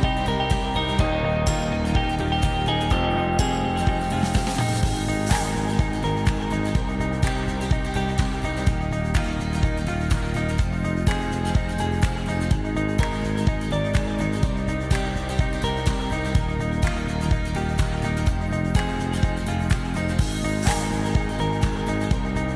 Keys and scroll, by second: 0.0-0.6 typing, 1.9 shift+a, 2.6 shift+p, 3.6 i, 7.6 BackSpace, 9.8 0, 16.0 v.